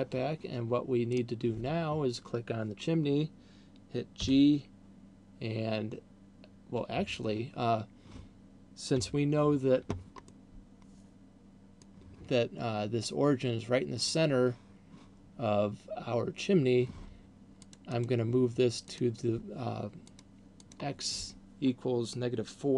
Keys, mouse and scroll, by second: 1.5 right click, 4.5 g, 9.3 n, 10.5 middle click, 18.0 click, 18.3 click, 19.3 click, 21.0 click.